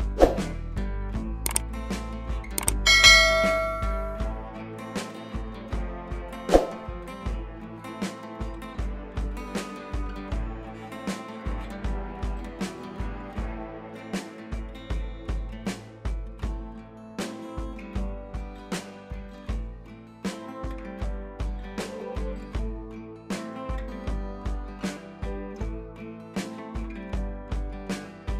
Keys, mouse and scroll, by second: 16.5-18.3 scroll down 1, 21.5-26.3 drag.